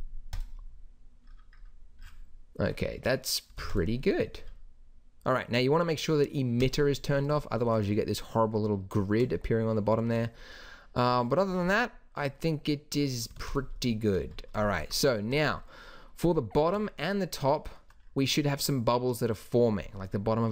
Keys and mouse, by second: 3.6 ctrl+s, 7.4 middle click, 13.4 ctrl+s, 15.3-17.3 drag.